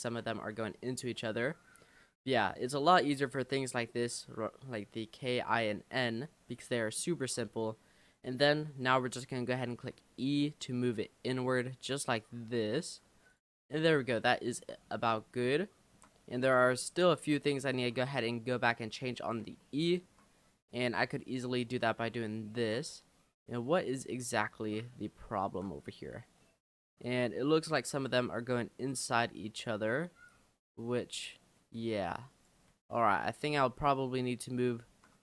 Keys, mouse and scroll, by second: 0.1-0.7 scroll down 2, 0.7-2.5 shift+middle drag, 2.5 scroll up 2, 2.9 middle click, 3.2 scroll down 2, 6.2 middle click, 7.1-7.5 scroll up 2, 9.1-9.5 scroll down 1, 9.7 e, 13.1 Tab, 13.3 click, 13.6-14.0 middle drag, 14.0-14.3 scroll down 3, 14.3-14.9 shift+middle drag, 14.9-15.7 scroll up 7, 15.7 shift+middle click, 16.4 click, 16.6-17.0 scroll up 3, 17.0 middle click, 17.5 scroll up 1, 17.8 click, 18.1 Tab, 19.2 click, 19.8-21.2 shift+middle drag, 21.2 click, 21.8-22.1 scroll up 9, 22.2 shift+middle click, 23.1-23.5 scroll up 1, 23.5 middle click, 24.3-25.2 scroll down 7, 25.2 shift+middle click, 25.8-26.6 scroll up 10, 26.6-29.6 middle drag, 29.6 click, 30.3 click, 32.8 ctrl+z, 33.3 click, 34.4-35.2 shift+middle drag.